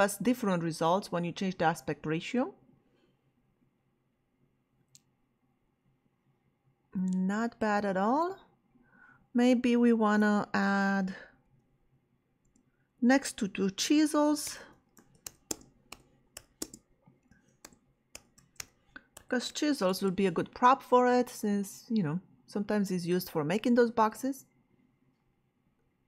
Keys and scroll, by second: 11.4 ,, 12.4 space, 14.2-19.5 typing, 19.9 Return.